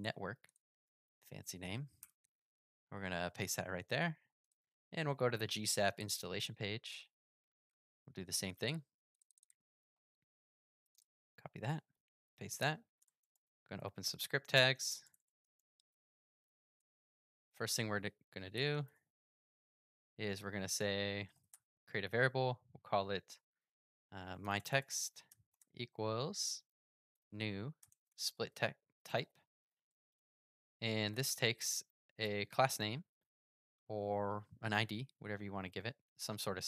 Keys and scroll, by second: 0.0 super+c, 0.8 super+v, 9.9 super+c.